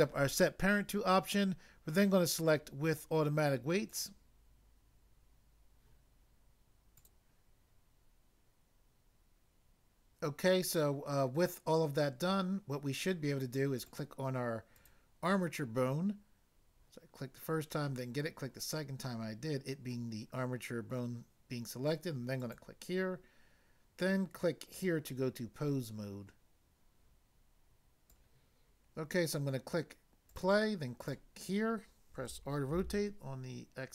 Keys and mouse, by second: 3.9 click, 7.0 click, 7.0 click, 13.9 click, 14.7 click, 14.8 click, 22.4 click, 24.7 click, 28.1 click, 30.3 click, 31.0 click, 31.1 click, 32.3 r.